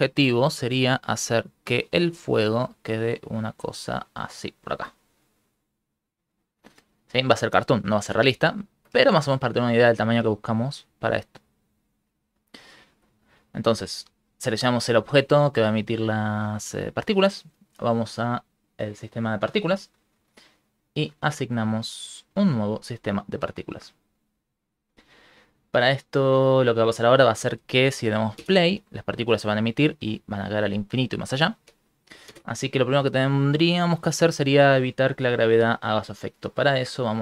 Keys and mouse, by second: 1.4 click, 2.4 click, 3.2 click, 7.9 space, 8.0 space, 8.7 shift+middle click, 10.4 shift+middle click, 11.0 g, 12.8 shift+middle click, 15.2 middle click, 16.6 middle click, 17.9 click, 18.1 click, 18.3 click, 18.4 click, 18.7 click, 22.0 click, 25.7 ctrl+middle click, 27.6 shift+middle click, 28.4 shift+space, 29.4 ctrl+middle click, 30.2 ctrl+middle click, 32.3 shift+space, 33.6 click, 37.1 click.